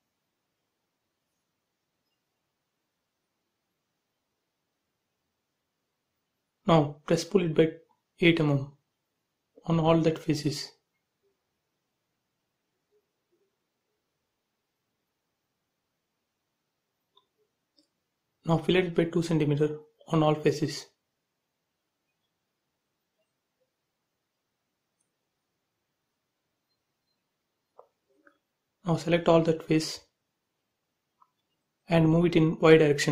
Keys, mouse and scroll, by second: 0.2 f, 0.4 click, 3.2 click, 3.5 space, 4.0 click, 4.5-5.3 scroll up 1, 5.7 p, 5.9 click, 7.4-9.0 typing, 10.0-11.4 typing, 11.5 click, 15.7 space, 16.1 click, 16.4 scroll up 1, 17.3-19.8 typing, 17.6 click, 20.6 click, 21.9 f, 22.2 click, 26.2 space, 26.6 click, 27.3 shift+click, 27.8 shift+click, 30.3-30.7 scroll up 1, 31.1 middle click, 32.1 scroll up 1, 33.0 m.